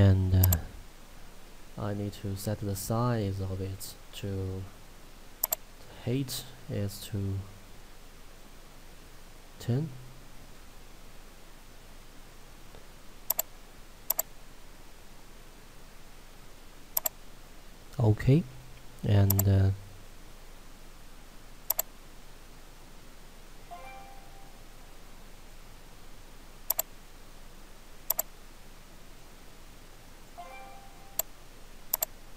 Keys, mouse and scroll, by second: 0.5 click, 5.4 click, 13.4 click, 14.5-16.2 scroll down 1, 16.2-17.0 scroll up 1, 17.0 click, 17.4 scroll up 1, 19.4 click, 31.1 scroll up 1, 31.2 click.